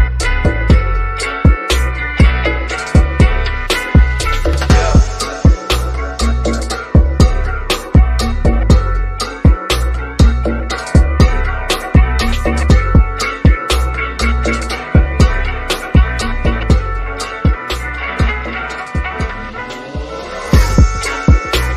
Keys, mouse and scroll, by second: 3.1 click, 5.0 click, 10.0 typing, 11.7 click, 12.6 typing, 13.2 click, 13.3 click, 16.6 typing, 17.5 click, 20.2 typing.